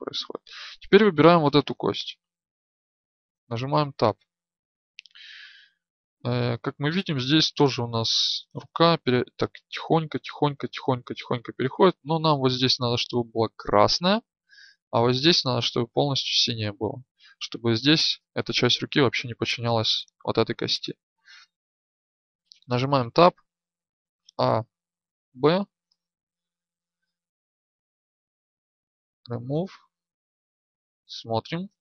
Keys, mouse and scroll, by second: 1.0 right click, 2.9 Tab, 4.8 Tab, 22.2 Tab, 24.0 a, 30.6 Tab, 30.6-31.8 drag.